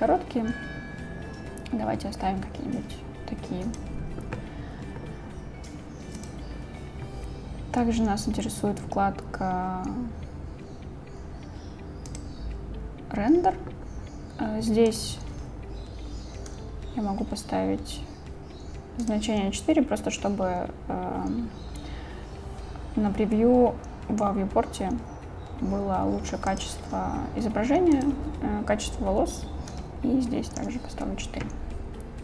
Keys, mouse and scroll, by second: 3.9 click, 6.2 click, 12.1 click, 15.0-19.1 drag, 26.5 click, 28.1-30.7 drag.